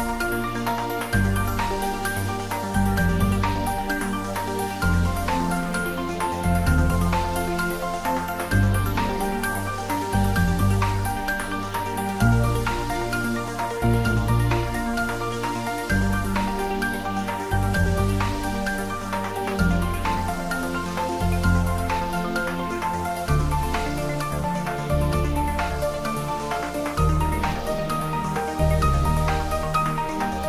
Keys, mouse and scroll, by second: 0.9-1.6 scroll up 1, 2.0-3.3 scroll up 1, 3.3 click, 4.9-6.2 scroll down 1, 7.8 click, 11.1 click, 11.3 ctrl+z, 14.5 Tab, 16.1 click, 21.5 click, 22.5 Tab, 23.3 click, 26.7 click.